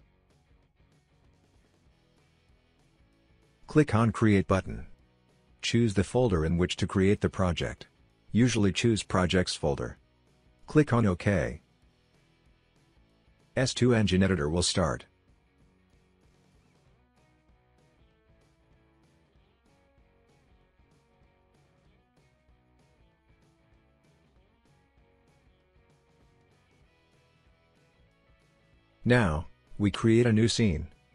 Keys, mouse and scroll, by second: 0.0-2.3 typing, 4.7-5.8 drag, 7.4-8.5 drag, 8.6 click, 12.8-13.8 drag.